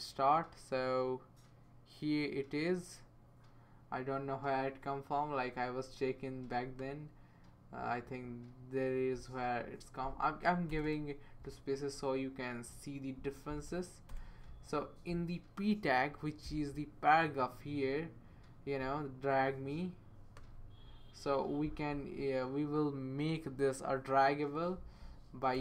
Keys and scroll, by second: 10.7 Return, 10.8 Return, 14.1 Return, 25.5 space.